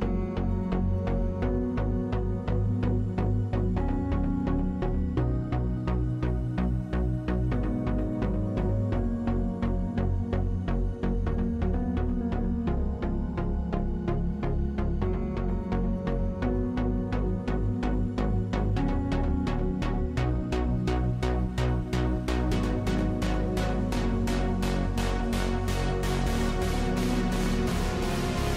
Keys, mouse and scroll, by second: 0.2-1.3 middle drag, 1.2 Tab, 1.4 r, 6.5 w, 7.5 Tab, 8.1 ctrl+Tab, 9.6 click, 9.9 z, 10.5 z, 10.9 alt+q, 12.0 ctrl+w, 16.8-18.8 drag, 18.8 Tab, 20.8 Tab, 22.5 z, 22.9 z, 23.5 r, 27.7-28.5 middle drag, 28.3 a.